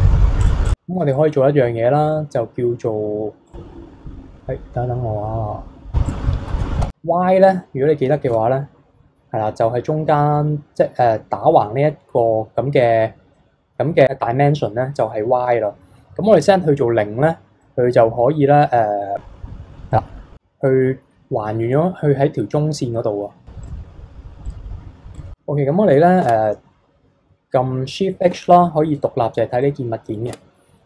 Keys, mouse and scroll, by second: 0.4 click, 1.0 b, 3.5 drag, 6.1-8.3 drag, 13.3-14.9 middle drag, 17.6-19.2 middle drag, 19.2-19.9 scroll up 3, 19.9-22.5 middle drag, 23.6-26.2 drag, 26.2 Tab, 28.3 shift+h, 29.0 click, 29.6-30.3 middle drag, 30.3 Tab.